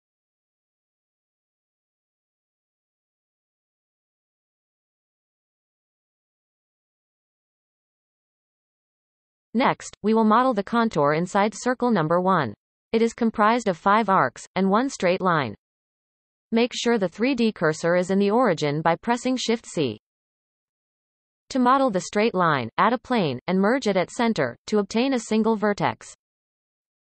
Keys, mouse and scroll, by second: 1.4 x, 1.6 shift+middle click, 1.8 scroll up 3, 2.1 drag, 2.3 ctrl+KP_Add, 2.4 ctrl+KP_Add, 2.4 x, 2.7-3.5 scroll down 20, 3.5 shift+middle click, 4.1 alt+shift+click, 5.1 Tab, 6.1-15.0 shift+middle drag, 16.1 shift+c, 16.6-18.1 scroll up 1, 18.1 Tab, 18.8-21.9 scroll up 2, 21.9 shift+a, 24.2 m, 26.9 g.